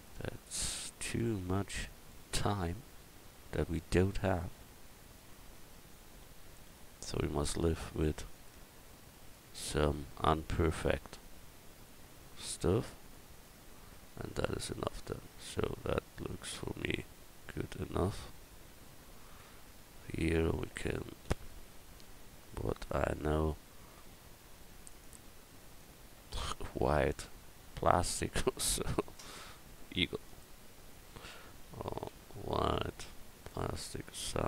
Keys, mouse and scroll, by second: 3.7-5.2 right drag, 4.4-5.4 drag, 4.4 middle click, 5.5 click, 5.7-6.7 right drag, 8.0 Tab, 8.6 Tab, 9.7 click, 11.1 click, 12.4 click, 12.4 right click, 13.4 click, 13.4 right click, 13.9 Tab, 18.8 Tab, 21.4 e, 24.9 click.